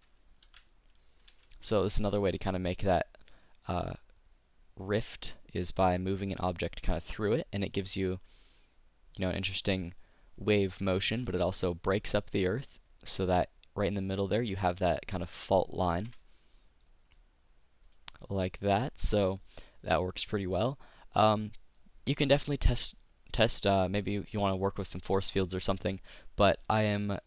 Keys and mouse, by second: 0.6 z, 1.5 a, 9.5 click, 9.9-11.2 middle drag, 12.5-14.3 drag, 16.4 KP_5, 17.3 middle click, 17.5-19.1 middle drag, 19.1 click, 19.9 click, 20.1-26.2 middle drag, 26.2 click.